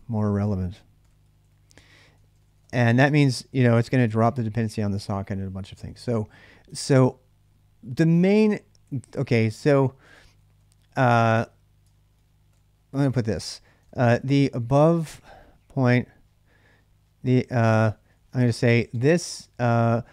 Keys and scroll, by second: 0.0-4.0 typing, 3.8 Return, 6.5 ctrl+[, 6.7 k, 8.7-20.1 typing.